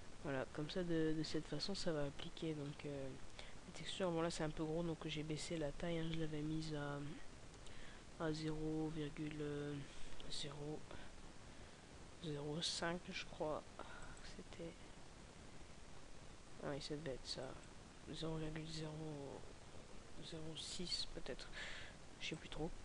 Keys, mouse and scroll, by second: 1.5-2.0 scroll up 2, 3.0 scroll up 9, 3.8-4.5 scroll up 1.